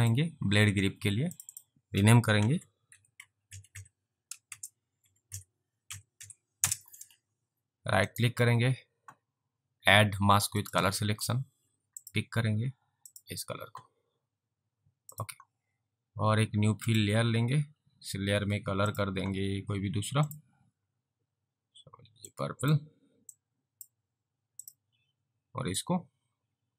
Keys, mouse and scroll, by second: 0.0 click, 2.5-6.4 typing, 6.6 Return, 8.1 right click, 10.7 click, 15.2 click, 16.8 click, 18.9 click, 22.4 click, 23.4 click, 25.8 click.